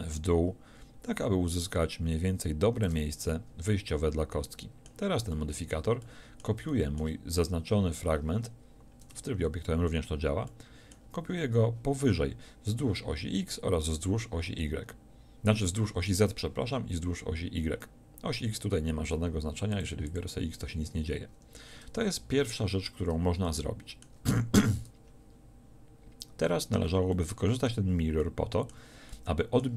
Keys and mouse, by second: 1.3-4.5 middle drag, 9.1 Tab, 9.1-12.3 middle drag, 12.6-19.7 middle drag, 21.3 Tab, 21.7 Tab.